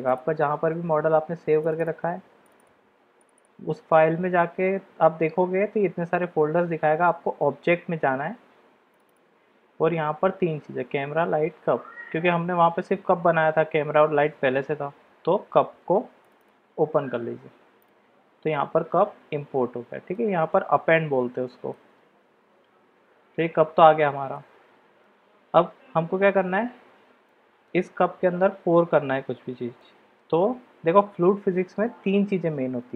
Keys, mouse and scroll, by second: 17.8 click, 18.5-20.2 middle drag, 20.7-21.7 middle drag, 24.3-25.0 middle drag, 27.2-27.6 middle drag, 29.8-30.2 shift+middle drag.